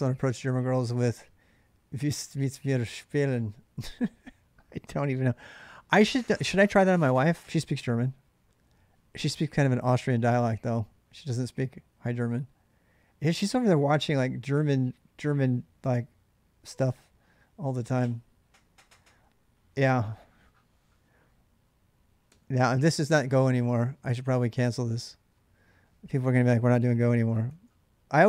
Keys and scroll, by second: 22.1 j, 23.5 k, 26.5-28.2 typing.